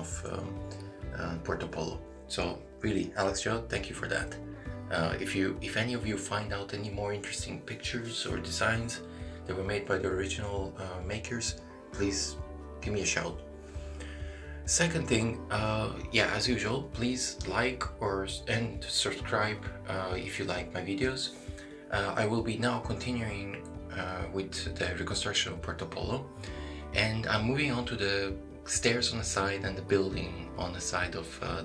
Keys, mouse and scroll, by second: 0.8-2.2 scroll down 2, 1.3 middle click, 2.2 shift+middle click, 3.0 middle click, 4.8-5.2 scroll down 5, 5.4 middle click, 6.4 middle click, 6.9 shift+middle click, 7.3 scroll down 1, 7.8 shift+middle click, 8.2 scroll down 1, 8.6 shift+middle click, 8.8 scroll down 1, 10.9 click, 11.7 middle click, 13.9 s, 17.5 click, 20.7 s, 25.4 click, 26.2 middle click, 27.2 shift+middle click, 27.9 scroll up 2, 28.6 shift+middle click, 29.9 s, 31.5 middle click.